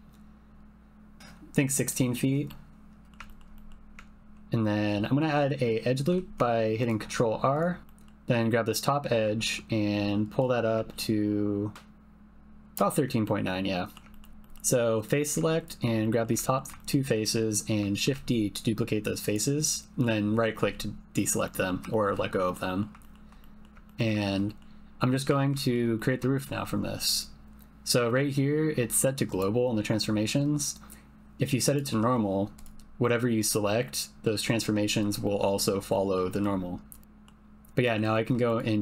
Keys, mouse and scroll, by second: 2.6 click, 3.3 ctrl+click, 3.5 click, 6.1 ctrl+r, 7.5 click, 8.4-9.4 drag, 10.4 click, 13.2 middle click, 14.3 3, 14.4 click, 16.0 shift+click, 16.3-16.6 typing, 16.4 ctrl+click, 16.7 shift+click, 17.2 click, 18.0 shift+d, 19.2 click, 19.7 middle click, 21.5 middle click, 21.9 shift+middle click, 22.5 middle click, 23.0 shift+middle click, 23.4 middle click, 23.6 click, 23.8 ctrl+middle click, 24.2 shift+middle click, 24.6 middle click, 25.6 shift+click, 26.3 shift+click, 29.3-32.2 drag, 33.0 click, 33.4 click, 33.8 click, 35.2 click, 35.9 click, 37.0 middle click, 37.8 middle click, 38.5 click.